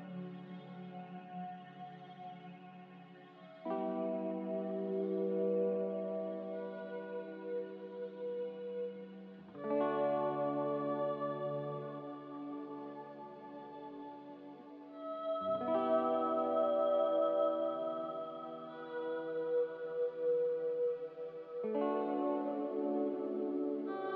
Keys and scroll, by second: 3.5 z, 5.2-6.1 typing, 7.3 ctrl+z, 10.4-11.2 typing, 14.3-15.1 typing, 19.0 a.